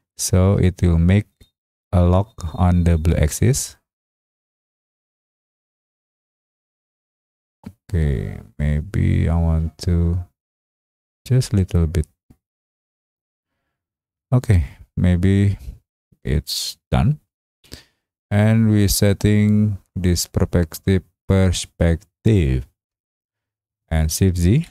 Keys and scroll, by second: 24.5 shift+z.